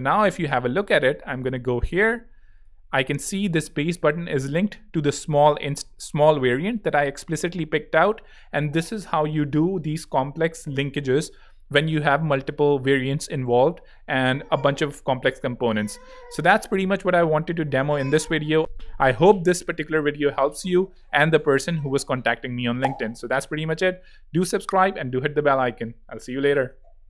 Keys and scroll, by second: 2.4 z, 12.3 alt+z.